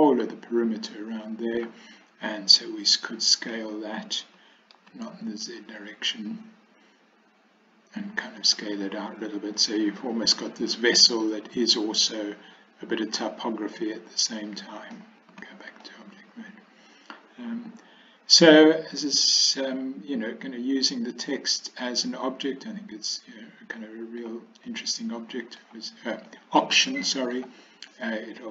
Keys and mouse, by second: 1.0 middle click, 3.5 s, 8.6-15.1 middle drag, 15.4 Tab, 15.9-18.7 middle drag, 19.5-24.3 middle drag, 24.7-25.7 middle drag, 26.3-27.4 middle drag, 27.9-28.5 middle drag.